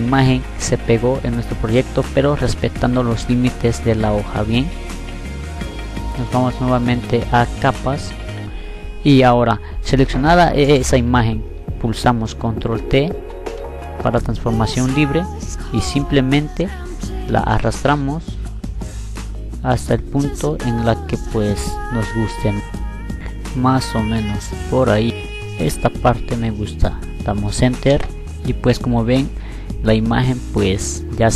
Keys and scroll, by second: 11.0 ctrl+t, 26.6 e.